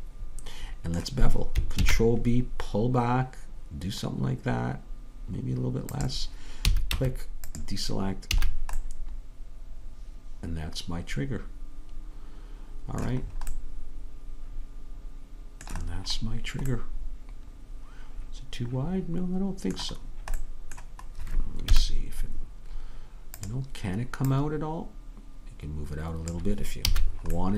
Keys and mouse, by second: 1.8 ctrl+b, 6.7 a, 7.0 Tab, 8.4 a, 14.5 middle click, 15.1-18.9 middle drag, 20.1-21.8 middle drag, 21.8 KP_3, 27.0 a.